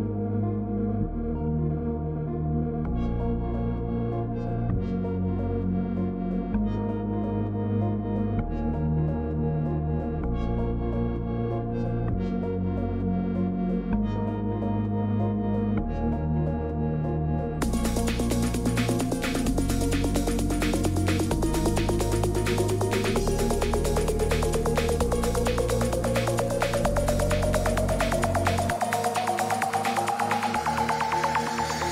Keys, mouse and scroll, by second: 0.0-31.9 typing, 0.6 click, 1.6 click, 1.7 right click, 3.6 click, 6.2 click, 7.2 click, 7.6 Escape, 8.8 click, 10.8 click, 13.4 click, 14.2 click, 16.3 click, 17.8 click, 18.0 click, 26.3 Return, 29.7 Return.